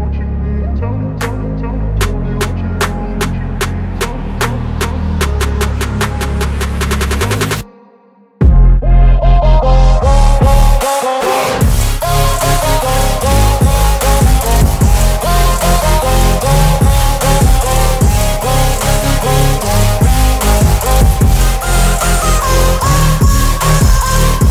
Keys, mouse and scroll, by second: 3.7 ctrl+alt+c, 5.7 alt+click, 7.3 alt+right click, 7.9-12.0 alt+drag, 14.0 ctrl+alt+v, 14.9 ctrl+alt+a, 16.5 alt+click, 22.6-24.5 alt+drag.